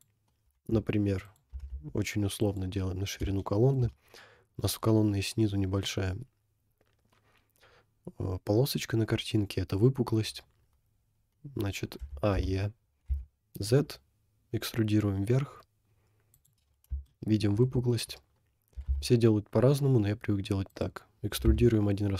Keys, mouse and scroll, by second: 0.5 s, 2.8-3.1 scroll down 1, 3.2 shift+middle click, 9.2 scroll up 2, 12.0 a, 12.6 e, 16.7-17.1 scroll up 2, 17.1 shift+middle click, 17.8 scroll up 2, 18.8 e, 21.5 e.